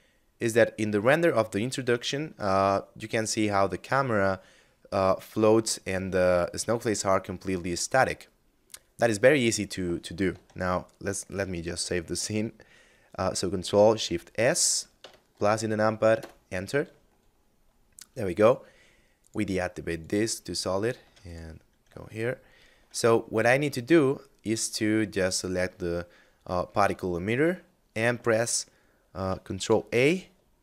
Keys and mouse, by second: 12.9 ctrl+shift+s, 13.9 KP_Add, 15.4 Return, 18.4 click, 20.0 ctrl+s, 20.2 click, 21.3 shift+middle click, 23.0 middle click, 24.2 right click, 28.6 ctrl+a.